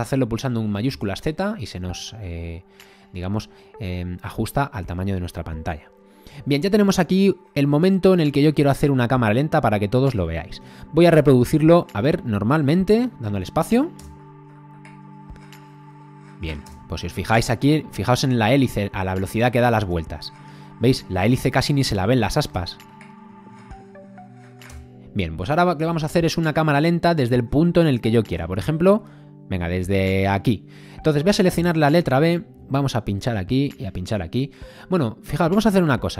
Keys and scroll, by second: 0.9 shift+z, 14.0 space, 16.7 space, 19.8 space, 21.3 space, 22.5 space, 24.7 space, 31.5 b.